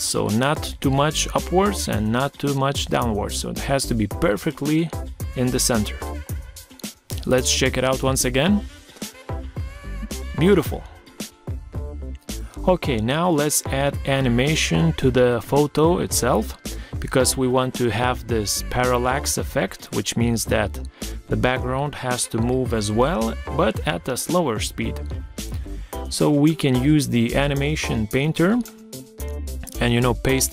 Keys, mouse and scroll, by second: 7.1 Right, 11.4 Escape, 17.2 ctrl+scroll down 1, 24.9 ctrl+scroll down 1, 30.0 shift+click.